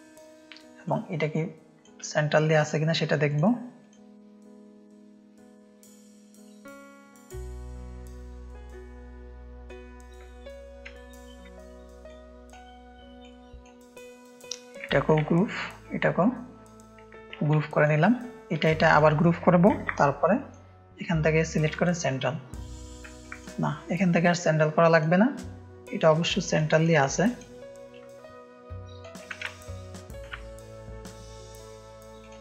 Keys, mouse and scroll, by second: 2.5 click, 3.2-7.9 drag, 12.0-12.5 drag, 13.2 click, 15.2 ctrl+g, 15.8 click, 17.4 ctrl+g, 17.7 click, 18.8 shift+click, 19.7 ctrl+g, 20.2 click, 21.7-22.9 drag, 23.2 ctrl+z, 23.3 click, 24.9-26.1 drag, 26.2 ctrl+space, 26.2 ctrl+click, 26.7 click, 27.1 ctrl+click, 27.9 shift+click, 29.4 ctrl+space, 29.4 click.